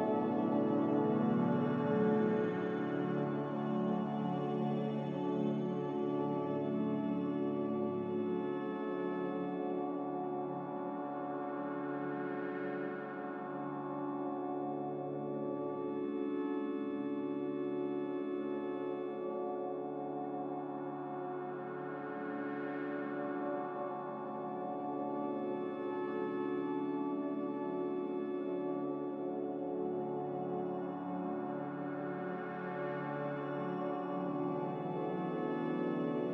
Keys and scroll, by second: 3.7 ctrl+z, 7.0 a, 11.9 a, 13.6 a, 16.4 q, 19.0 typing, 21.3-22.2 typing, 23.0 ctrl+k.